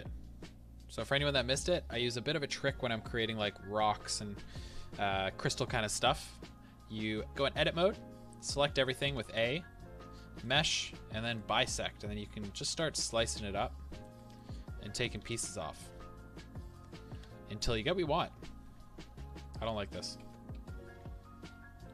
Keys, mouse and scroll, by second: 9.1-14.3 drag, 9.1 a, 14.3-21.9 middle drag, 15.2 Tab, 17.1 KP_1, 20.2 ctrl+z.